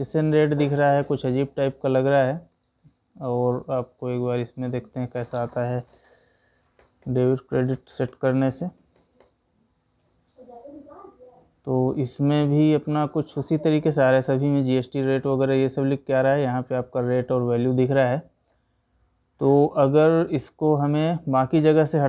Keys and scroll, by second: 2.0 Escape, 19.9 Escape.